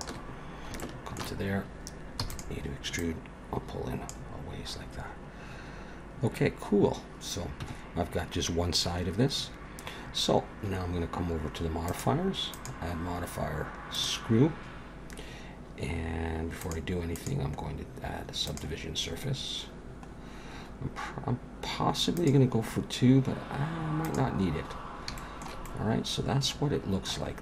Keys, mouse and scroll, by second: 0.8 shift+middle click, 2.2 e, 3.0 click, 4.4-6.3 scroll down 7, 7.7 Tab, 8.6-10.6 scroll down 1, 11.9 click, 12.5 click, 16.6 click, 17.2 click, 20.1-22.1 scroll up 1, 22.1 click, 24.0 click, 24.6-25.1 scroll down 2, 25.2 shift+middle click, 25.6 middle click, 27.3-27.4 scroll up 3.